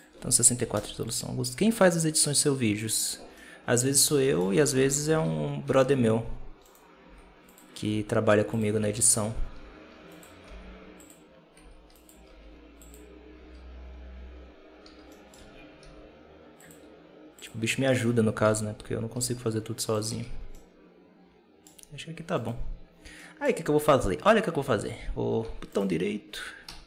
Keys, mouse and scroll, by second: 3.2-4.6 middle drag, 4.6 KP_7, 5.0 alt+a, 5.6 Tab, 6.5 right click, 6.9 s, 7.7 r, 8.9 right click, 9.4 r, 10.3 g, 11.5 s, 12.1 r, 13.3 Tab, 14.1-14.7 scroll down 1, 14.7 Tab, 15.0 middle click, 15.2 a, 15.7 w, 17.8 right click, 18.3 KP_7, 19.0 r, 20.0 Tab, 20.4-21.7 middle drag, 21.7-22.3 scroll up 3, 22.3 right click, 22.8 scroll down 2, 23.1-24.5 middle drag, 24.5 ctrl+a, 25.6-26.5 right drag, 26.5 w.